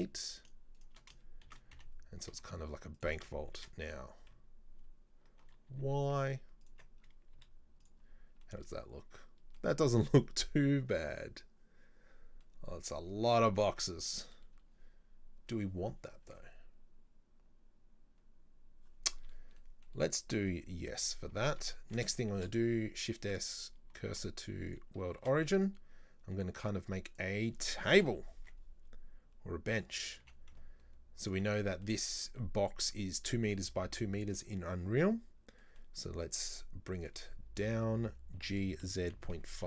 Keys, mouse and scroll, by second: 0.5 right click, 0.8 shift+right click, 1.5 shift+d, 3.6 shift+d, 7.1-7.4 scroll up 2, 7.4 z, 8.2-8.5 scroll up 2, 8.5-11.5 middle drag, 12.5-19.3 middle drag, 19.3 scroll down 2, 19.6-20.1 middle drag, 20.4-21.5 middle drag, 21.5-21.8 scroll down 2, 21.8-22.4 shift+middle drag, 22.4 shift+s, 24.1 shift+s, 25.2 shift+a, 28.1 KP_7, 28.5 Tab, 30.3 g, 31.6 middle click, 32.0-32.4 scroll up 2, 32.4-37.1 middle drag, 37.1 click, 37.6 right click, 38.4 g.